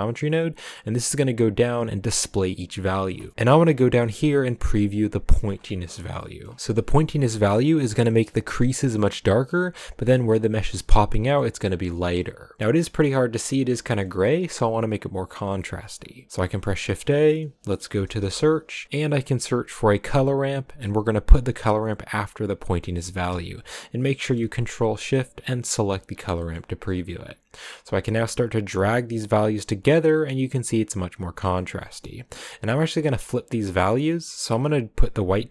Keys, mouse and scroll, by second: 1.4 ctrl+shift+click, 2.0 ctrl+shift+click, 3.3 ctrl+shift+click, 5.4-5.9 scroll down 5, 6.1 shift+middle click, 6.5-8.6 scroll up 2, 8.6-8.9 scroll down 2, 8.9-10.2 middle drag, 10.2 scroll down 1, 10.4-12.2 middle drag, 12.2-12.6 scroll down 3, 12.6-19.4 middle drag, 22.2 click, 23.4 ctrl+shift+click, 24.4 middle click, 24.9 click, 27.9-31.6 drag, 31.6 middle click, 32.1-32.8 scroll up 1, 32.8-34.9 drag, 34.9-35.3 scroll up 4, 35.3-35.5 drag.